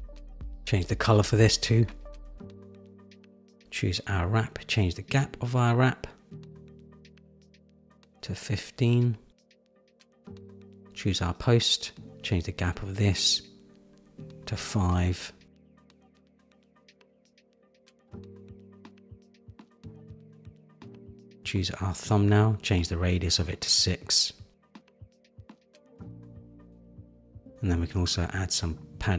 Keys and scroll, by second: 6.0 shift+Down, 7.7 shift+Down, 8.6 Up, 14.5 Down, 23.2 Down.